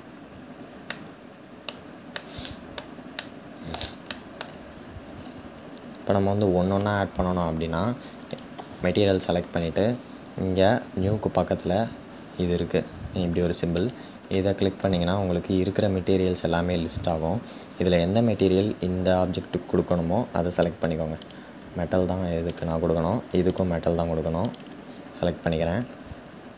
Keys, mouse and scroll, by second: 0.6 scroll down 1, 0.6-4.7 shift+middle drag, 4.7-5.9 scroll up 3, 8.0 click, 20.9 click, 23.2-25.0 drag, 25.0-25.6 scroll down 1, 25.6-26.5 scroll down 1.